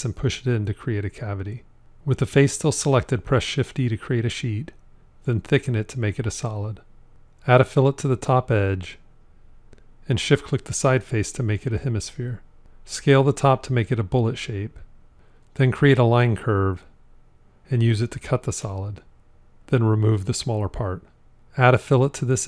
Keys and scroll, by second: 2.2 shift+d, 18.4 c.